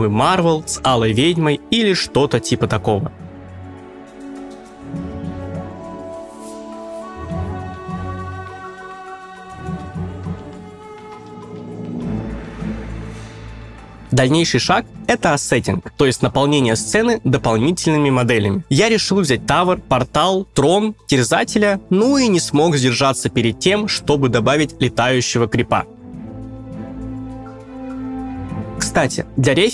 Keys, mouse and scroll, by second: 0.2 scroll up 1.